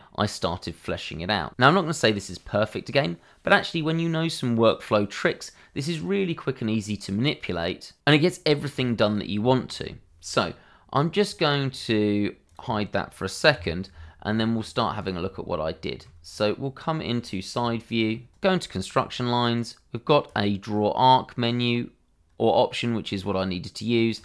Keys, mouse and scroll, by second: 2.4 shift+middle click, 9.6 shift+middle click, 11.2 click, 11.6-12.4 scroll down 1, 12.4 click, 14.3 h, 15.0 click, 15.8 shift+middle click, 16.2-18.2 scroll up 1, 18.8 click, 23.8 click.